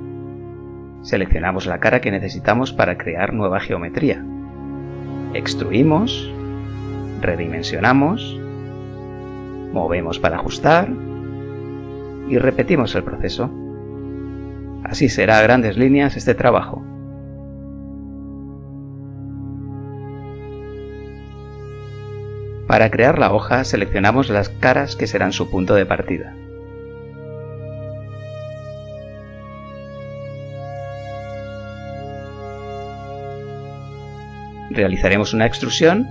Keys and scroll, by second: 0.4 z, 4.3 e, 7.0 s, 8.4 g, 21.9 z, 31.8 e.